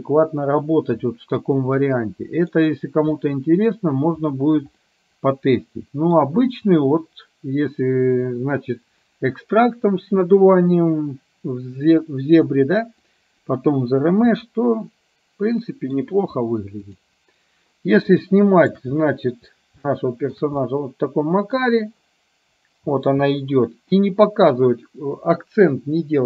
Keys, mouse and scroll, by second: 1.9-2.6 middle drag, 3.2-3.9 middle drag, 4.9-6.2 middle drag, 13.1-16.0 middle drag, 18.2-18.9 shift+middle drag, 20.0-20.4 shift+middle drag, 20.6-21.6 middle drag, 23.1 space.